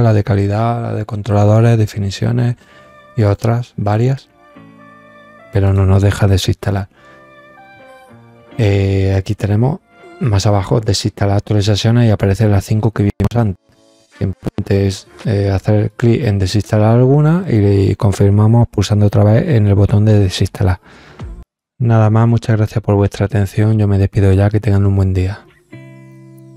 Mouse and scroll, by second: 3.1 click, 4.0 scroll down 3, 4.8 scroll up 2, 5.6 click, 11.5 click.